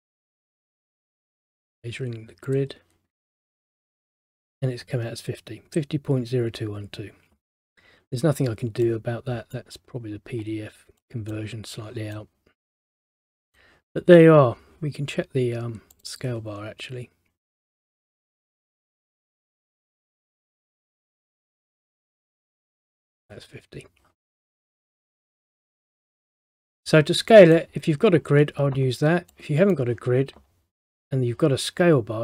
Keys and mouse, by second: 1.4 click, 7.6 middle click, 9.0 middle click, 11.1 middle click, 16.1 click, 18.9 click, 20.3 click, 21.9 click, 24.4 middle click, 25.2 middle click, 26.4 middle click, 29.4 middle click.